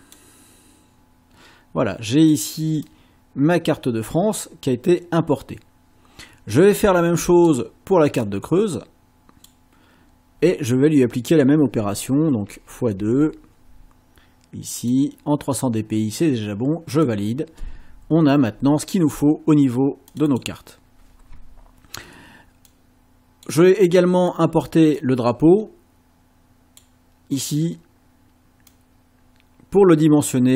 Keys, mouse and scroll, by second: 0.0 click, 2.9 click, 5.8-7.7 drag, 8.3-9.6 drag, 11.3 click, 12.5 *, 13.0 2, 14.8 click, 17.0 click, 20.1 click, 22.7 click, 24.3 click, 25.0-27.0 drag, 28.7-30.5 drag.